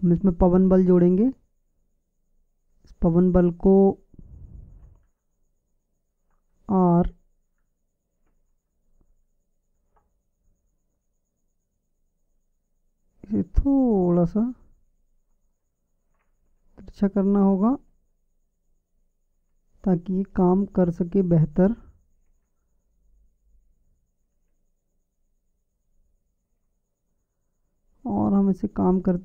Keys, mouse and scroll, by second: 0.5-2.5 drag, 5.9-7.7 drag, 9.4 r, 16.3 r, 19.6 KP_7, 21.1 r, 25.4 KP_5, 27.4 KP_1.